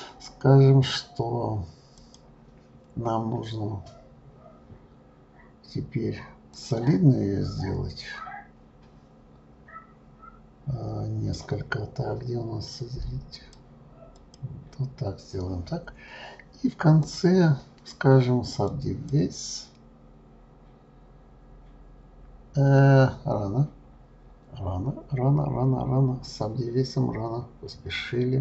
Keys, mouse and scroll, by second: 1.9-5.1 drag, 13.3-15.8 drag, 17.0-20.0 drag.